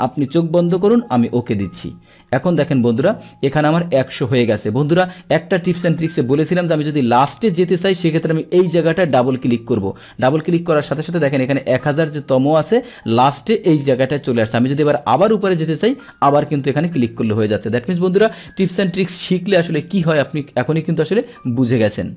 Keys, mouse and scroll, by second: 1.3 click, 2.6-8.1 middle drag, 9.0 click, 9.2 click, 16.1 click, 16.4 click.